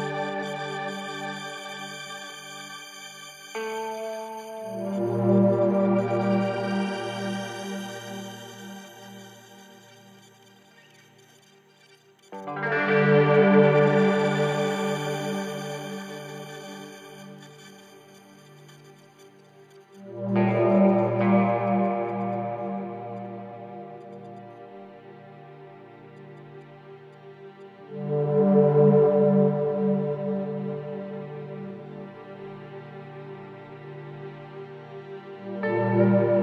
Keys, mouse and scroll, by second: 4.0-5.0 typing, 5.3 Return, 6.6 click, 10.0 ctrl+space, 10.1 ctrl+click, 10.5 ctrl+space, 10.8-13.0 drag, 19.5-21.6 typing, 23.0-23.7 typing, 31.4 typing, 33.2 Return, 34.9 click.